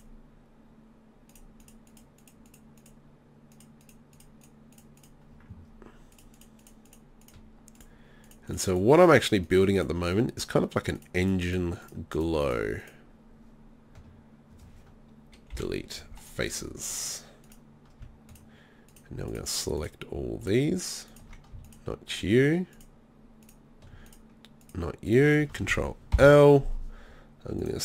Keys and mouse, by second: 6.4 shift+right click, 6.7 shift+right click, 15.5 Delete, 16.9 click, 26.1 ctrl+l.